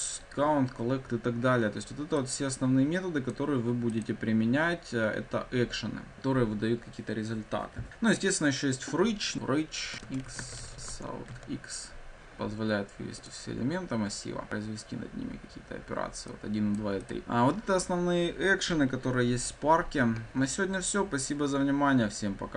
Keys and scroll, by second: 9.3 Return, 10.8 Tab, 13.2 ctrl+F5.